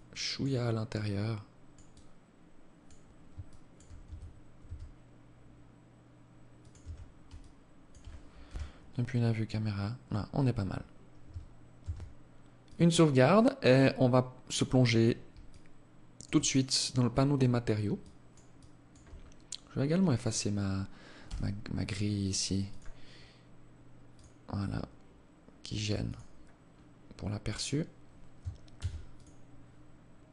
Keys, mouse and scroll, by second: 1.1 alt+click, 2.6 alt+shift+click, 3.3 Tab, 3.8 s, 6.0 Tab, 6.6 alt+click, 7.6 KP_0, 8.8 scroll down 1, 11.0 ctrl+s, 14.6 alt+click, 15.6-16.4 scroll down 7, 17.2 alt+click, 17.7 alt+click, 18.4-18.8 scroll up 3, 19.2 scroll down 1, 20.4 n, 21.1 scroll down 5, 21.8 click, 22.2 scroll down 3, 23.2 click, 25.3 click, 25.9-27.0 scroll up 5, 28.0 ctrl+s.